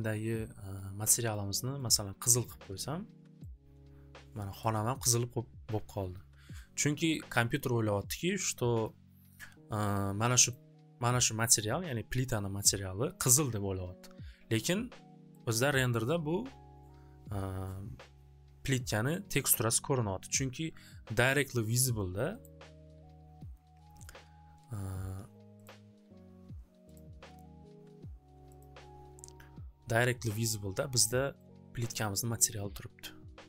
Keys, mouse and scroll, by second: 1.3 click, 1.9 click, 2.6 click, 4.6 click, 8.8 click, 10.5 scroll, 12.6 scroll, 14.9-19.0 middle drag, 19.0 scroll, 19.9 scroll, 22.4 click, 25.6 click, 26.9 click, 28.5 click.